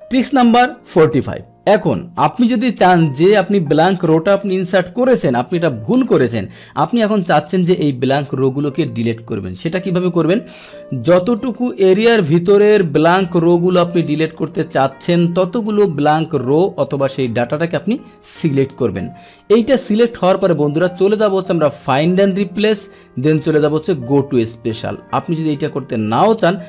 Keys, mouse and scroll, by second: 1.8 click, 5.3 ctrl+shift+l, 7.5 Left, 8.5 Up, 8.5 Down, 11.3-18.7 drag, 21.8 click, 24.0 click.